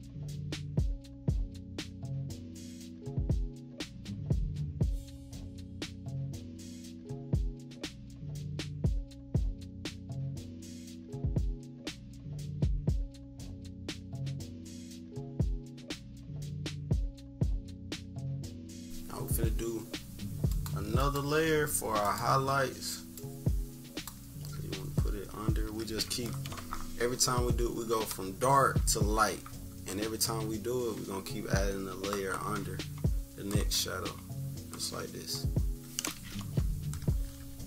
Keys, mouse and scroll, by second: 0.0 click, 0.6 =, 0.9 scroll down 2, 1.4 click, 2.4 click, 2.9 click, 3.1 click, 3.4 scroll down 2, 3.6-3.9 scroll up 2, 3.9 click, 4.6 click, 4.9 click, 5.2 click, 5.7 click, 5.9 click, 6.4-8.0 drag, 8.3 click, 8.6 click, 8.9 click, 9.1 click, 9.9 scroll down 2, 10.1-10.6 scroll up 4, 10.6 click, 11.1 click, 12.5 click, 13.1 click, 13.5 click, 14.2 click, 14.6 click, 14.9 click, 15.2 click, 15.5 click, 16.0 click, 16.4 click, 16.6 click, 16.9 click, 17.6 click, 17.8 click, 18.0 -, 18.4 scroll up 2, 18.7 =, 18.8 scroll down 2, 20.4-22.1 drag, 23.1-24.0 drag, 24.6 -, 24.9-25.2 scroll down 2, 25.3 =, 25.6 scroll up 2, 37.4 -.